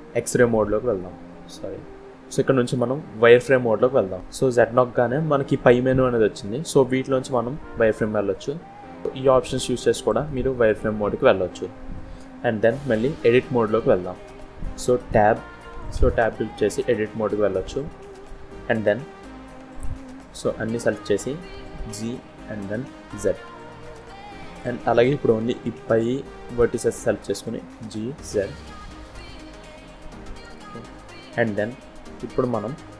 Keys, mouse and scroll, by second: 9.0 click, 9.0 scroll down 3, 9.8 click, 10.5 click, 11.6-11.9 scroll up 1, 15.9 Tab, 16.8 scroll up 1, 17.6 shift+middle click, 18.3 scroll up 1, 19.6 click, 21.7 g, 25.4 click, 27.6 g.